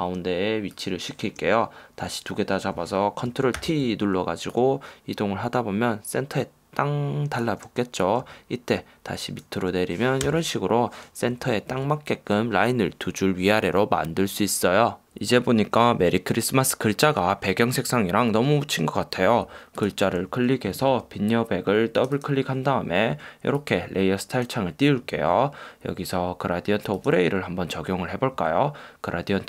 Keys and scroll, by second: 3.8 super+t, 13.0 Down.